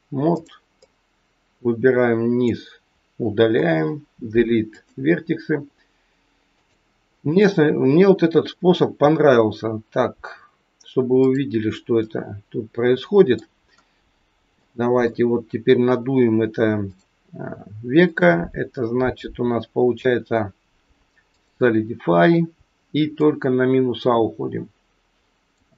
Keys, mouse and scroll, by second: 0.3 click, 0.8 click, 3.5 Delete, 6.5 click, 11.2 click, 11.9 middle click, 13.6-14.2 scroll down 1, 14.5 shift+middle click, 16.8 click, 18.1 click, 23.1 click.